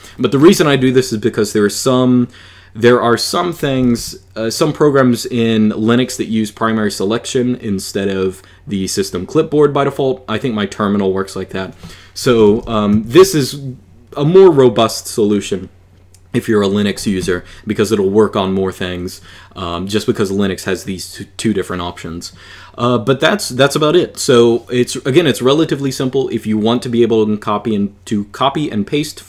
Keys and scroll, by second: 3.4 k, 3.6 k, 3.8 k, 11.8-13.3 typing.